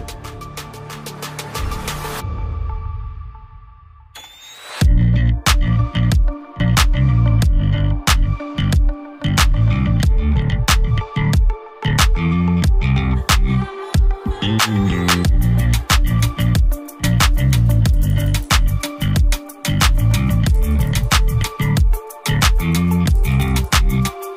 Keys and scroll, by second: 0.4 e, 1.2 b, 6.0 ctrl+d, 16.9 ctrl+z, 17.3 [, 19.4 e, 19.7 b, 20.5 ctrl+d, 20.6 ctrl+KP_0, 23.6 ].